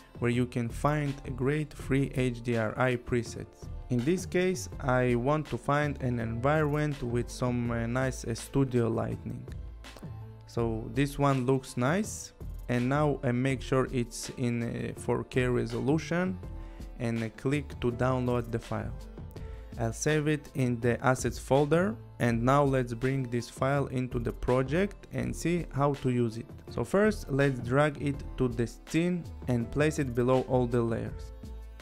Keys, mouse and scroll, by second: 0.8 click, 3.2 scroll, 10.8 scroll, 11.4 click, 14.2 click, 20.7 click, 26.3 click, 27.4 click, 28.2 click, 29.3 click, 31.3 click.